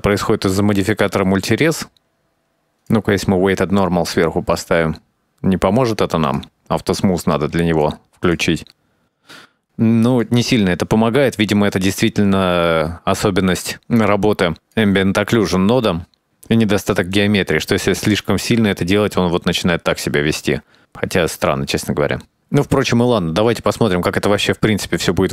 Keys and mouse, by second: 0.2 click, 0.8 click, 0.9 click, 2.0 ctrl+a, 2.4 ctrl+z, 2.6 shift+middle click, 2.7-3.8 drag, 5.0 click, 7.4-7.8 drag, 8.7 click, 9.9 click, 13.6 click, 14.8 click, 17.3-22.2 drag, 22.5-23.1 middle drag, 23.5-23.8 shift+middle drag, 24.3-25.3 drag.